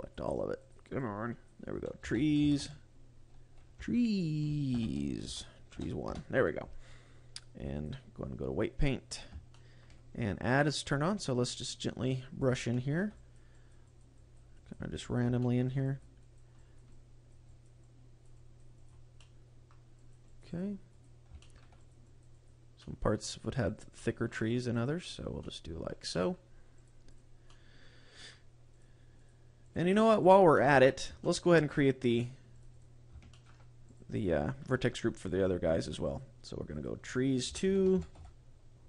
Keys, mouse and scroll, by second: 7.6 click, 8.8 click, 9.4 shift+middle click, 10.6-11.0 scroll up 3, 11.4 click, 11.9 click, 12.3 click, 12.6 shift+middle click, 13.1 click, 13.4 click, 13.7 click, 14.1 click, 14.5 click, 14.9 click, 15.3 shift+middle click, 15.7 click, 16.1 click, 16.5 click, 16.9 click, 17.3 click, 17.7 click, 18.2 click, 18.8 click, 19.0 middle click, 19.8 click, 20.2 click, 20.4 click, 20.8 click, 21.3 shift+middle click, 21.7 click, 22.0 click, 22.2 click, 22.7 middle click, 23.4 click, 23.5 click, 23.8 middle click, 24.3 click, 24.6 click, 24.9 click, 25.3 middle click, 26.1 middle click, 26.7 click, 27.1 click, 27.3 middle click, 28.6 click, 29.0 click, 29.5 click, 29.9 click, 30.1 click, 30.4 middle click, 31.1 shift+middle click, 31.6 click, 32.0 click, 32.4 click, 32.6 click, 33.2 shift+middle click, 33.7 click, 35.9 click, 36.6 click, 36.9 click.